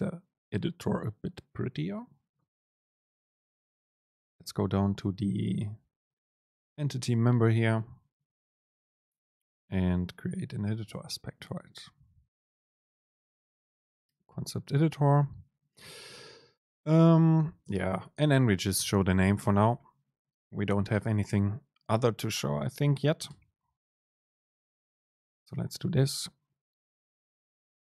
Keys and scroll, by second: 17.8 super+space.